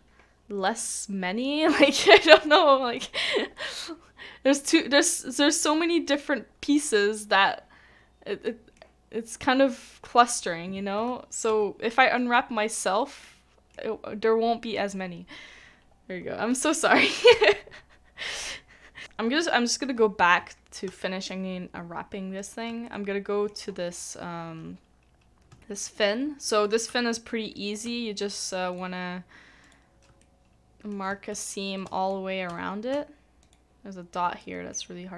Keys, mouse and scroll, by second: 2.4 middle click, 8.4 middle click, 10.9 middle click, 11.5 Tab, 13.2 middle click, 19.0 middle click, 19.2 scroll down 1, 20.0-20.8 scroll up 1, 21.2 shift+click, 22.4 shift+click, 22.8 middle click, 23.6-25.5 scroll down 1, 25.9 shift+click, 27.0 middle click, 28.7 shift+click, 29.6 shift+click, 30.2 middle click, 31.4 middle click, 32.5 shift+middle click, 33.4 shift+click, 34.4 middle click, 34.4 shift+click.